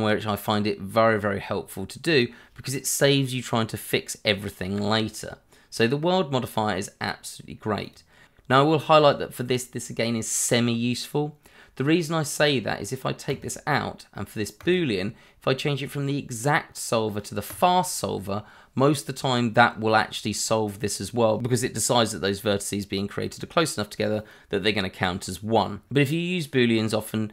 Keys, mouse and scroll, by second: 2.1-3.0 scroll up 1, 7.8 click, 8.4 click, 13.3 click, 17.5 click, 25.8-26.3 scroll down 1, 26.3 middle click, 27.0 shift+middle click.